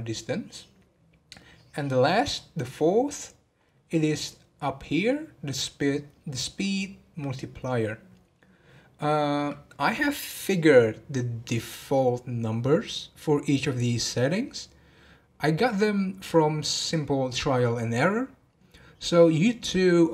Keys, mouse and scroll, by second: 2.0-2.7 scroll up 13, 3.9 scroll up 8, 7.1 scroll up 8.